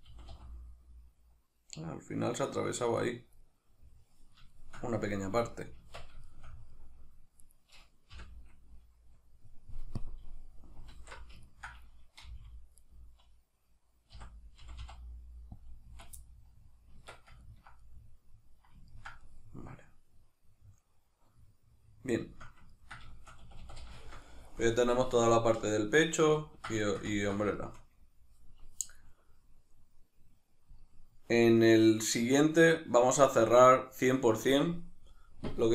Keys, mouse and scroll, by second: 0.1 g, 3.0 right click, 3.4-7.4 middle drag, 5.1 z, 5.8 Tab, 7.4 right click, 8.1 l, 10.0 click, 10.9 alt+q, 11.5-12.9 ctrl+middle drag, 12.3 g, 12.9 right click, 14.1 o, 15.7 click, 15.9 z, 16.2-22.7 middle drag, 17.0 Tab, 23.5 a, 24.0 shift+middle click, 29.6-35.7 middle drag.